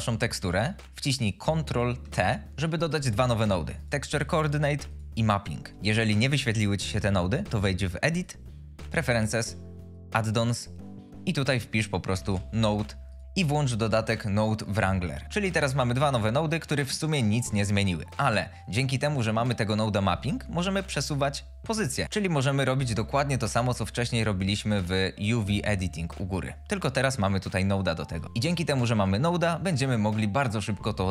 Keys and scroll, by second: 2.2 ctrl+t, 12.3 n, 12.5 o, 12.5 d, 28.2 ctrl+z.